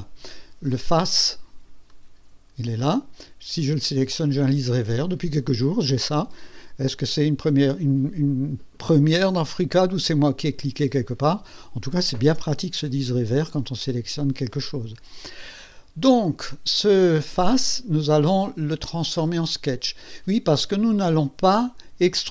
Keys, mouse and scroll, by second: 1.0 click, 1.9-2.8 right drag, 21.6 click.